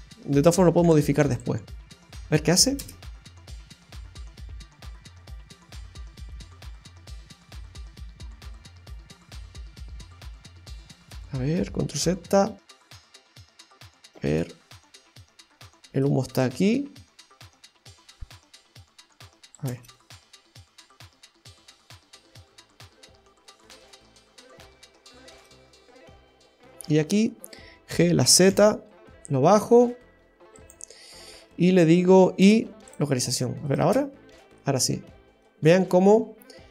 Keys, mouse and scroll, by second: 2.2 click, 2.8 space, 5.1-5.5 scroll up 2, 5.5 middle click, 11.0 space, 12.0 ctrl+z, 12.7 ctrl+z, 14.2 space, 15.9 space, 16.4 click, 19.6 space, 25.3 space, 33.7 click, 33.8 space, 35.5 middle click, 36.4-36.7 scroll up 1.